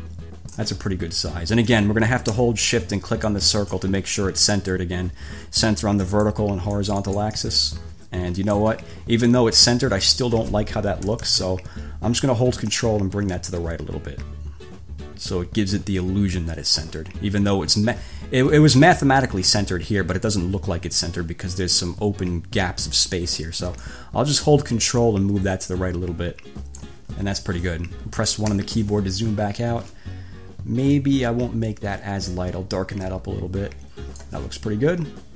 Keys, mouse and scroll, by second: 3.5 shift+click, 6.2 click, 7.0-7.9 drag, 8.6-9.7 drag, 11.2 =, 13.0 ctrl+click, 19.0 ctrl+z, 24.0 ctrl+click, 28.6 1, 31.1 click.